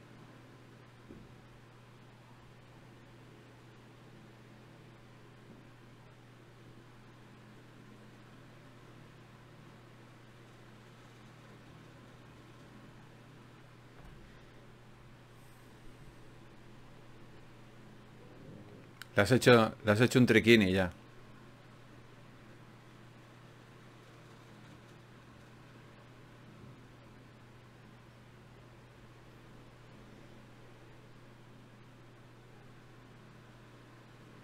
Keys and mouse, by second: 2.3 click, 3.1 shift+q, 7.1-8.9 middle drag, 8.9-11.8 right drag, 9.7 g, 10.9 g, 12.4 ctrl+Tab, 17.2 e, 18.8 click, 24.9 f, 26.4 ctrl+r, 28.4-32.9 drag, 31.5 g.